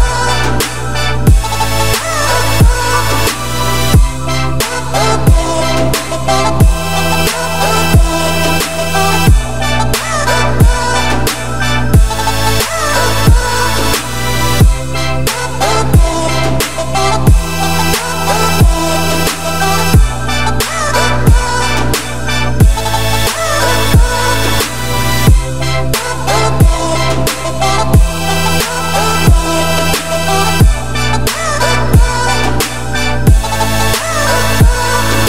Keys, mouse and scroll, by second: 0.1-0.7 scroll up 2, 0.7-1.7 scroll down 6, 1.7 scroll up 5, 2.6 `, 5.4 z, 5.7-6.0 scroll up 1, 6.0 shift+middle click, 6.2 scroll up 3, 6.5 g, 8.3-8.6 scroll up 1, 8.6 g, 9.9 scroll up 3, 10.2 shift+middle click, 10.4-11.0 scroll up 10, 11.0 shift+middle click, 11.3-12.0 scroll up 5, 12.0 g, 14.4-15.0 scroll down 16, 15.1 z, 15.4-16.6 middle drag, 16.6 g, 19.4-19.8 scroll down 5, 19.8-20.4 scroll up 6, 20.4 g, 24.8 shift+click, 25.7 shift+click, 26.0-26.5 scroll down 4, 26.5 g, 28.9 `, 29.4 z, 29.7-30.0 scroll up 6, 30.0 g, 31.5 Tab, 31.7-32.2 scroll down 4, 32.2 ctrl+a, 33.4 scroll down 2, 33.4 middle click, 33.7 Tab, 34.0 scroll up 1, 34.1 z, 34.6 g.